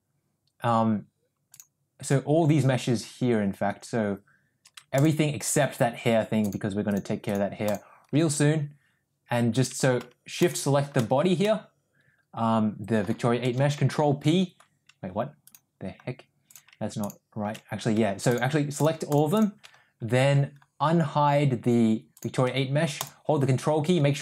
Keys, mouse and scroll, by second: 1.5 click, 5.0 ctrl+drag, 6.5 ctrl+click, 7.7 ctrl+click, 10.4 shift+click, 11.0 shift+middle drag, 11.5-13.1 middle drag, 14.0 ctrl+p, 15.5 click, 16.5 click, 19.1 ctrl+click, 19.4 ctrl+click, 22.2 drag, 23.0 ctrl+click.